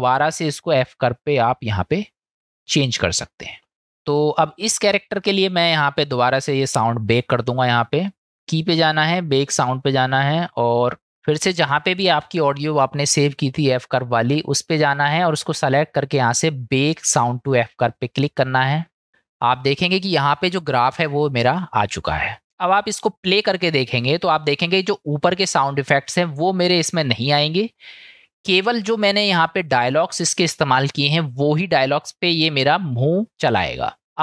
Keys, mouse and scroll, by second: 8.5-9.5 drag, 19.6-20.7 middle drag, 25.0-26.1 drag, 28.6-30.9 drag.